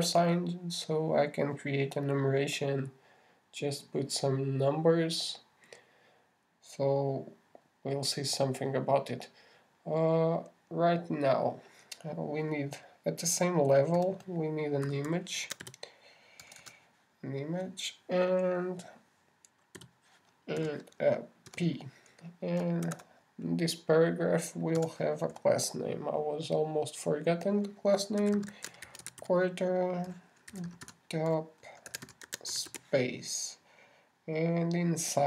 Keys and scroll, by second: 0.6 shift+space, 0.9 shift+4, 1.6 shift+Right, 24.3 shift+<.